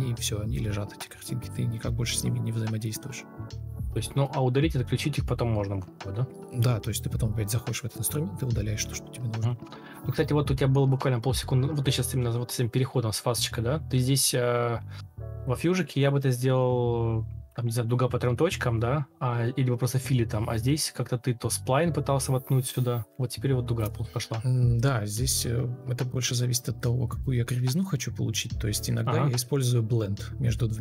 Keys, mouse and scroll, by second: 0.6 shift+t, 1.1 Tab, 1.3 ctrl+c, 1.5 Return, 2.3 shift+t, 2.9 Tab, 3.1 ctrl+v, 3.2 Return, 7.4 shift+t, 7.8 Escape, 7.9 Escape, 14.9 Delete, 15.3 ctrl+shift+o, 16.0 alt+Escape, 16.8 shift+t, 17.7 Escape, 19.0 alt+Escape, 21.5 alt+click, 26.5 ctrl+shift+o, 28.5 Escape, 29.2 ctrl+alt+shift+o, 29.3 alt+scroll up 1, 29.9 alt+click.